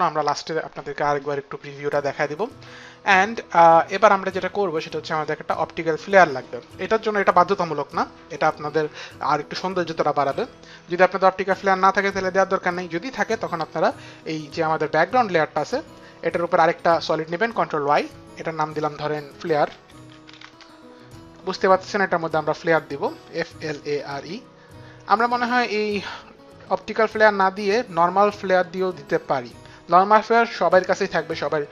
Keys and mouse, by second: 7.5 click, 16.2 ctrl+y, 18.9-20.3 typing, 21.8 click, 23.0-24.1 typing.